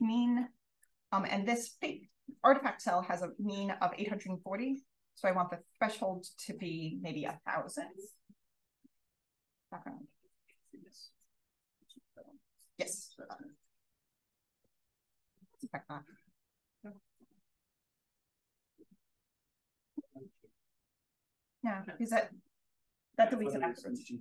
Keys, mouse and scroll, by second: 0.2 drag, 0.8 click, 5.3 click, 6.5 0, 12.7 click, 17.9 click, 19.5 click, 22.9-24.2 scroll.